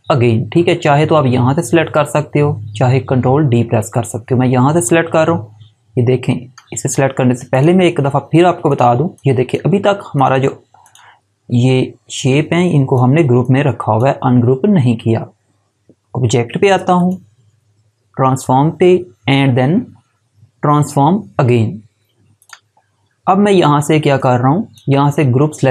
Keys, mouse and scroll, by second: 7.5 click, 16.9 click, 22.3 click.